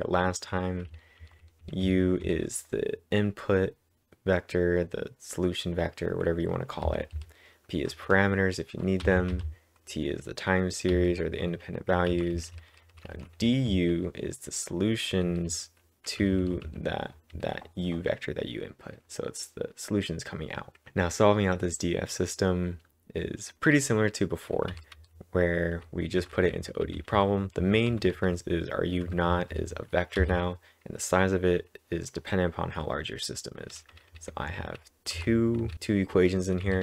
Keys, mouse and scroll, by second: 1.2-2.1 typing, 4.2 typing, 6.9 typing, 10.7-13.7 typing, 24.7 ctrl+/, 24.7-30.2 typing, 33.7-34.6 typing.